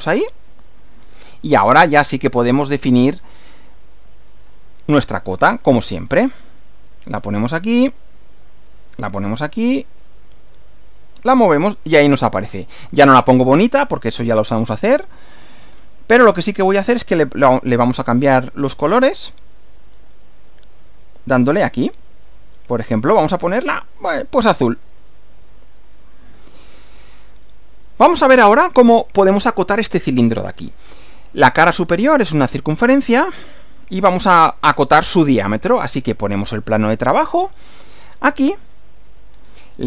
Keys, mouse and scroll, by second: 0.0 click, 0.8-2.1 middle drag, 2.2 middle click, 3.3-5.1 middle drag, 5.6 click, 7.1 click, 8.9 click, 10.9 click, 11.9 middle click, 12.9-14.1 middle drag, 15.7 click, 19.1 click, 20.7 click, 21.8 click, 23.6 click, 24.6 click, 25.3 click, 25.9 middle click, 27.0 shift+middle click, 33.4 click, 37.1 click, 38.5 shift+middle click, 39.3 shift+scroll up 1, 39.5 shift+scroll down 1.